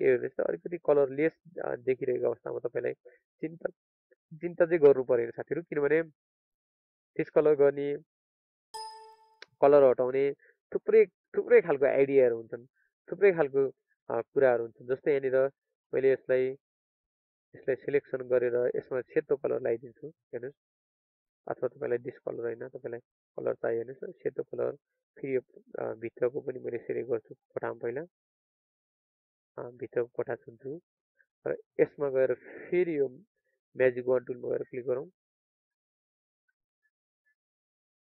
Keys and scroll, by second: 1.6 ctrl+alt+z, 22.6 alt+Delete, 23.9 ctrl+d, 29.2 ctrl+d, 37.6 ctrl+d.